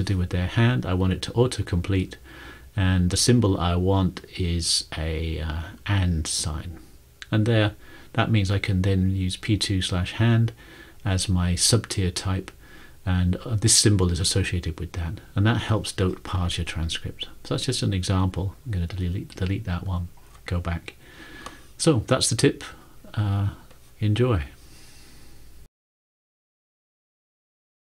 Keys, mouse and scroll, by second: 3.7 typing.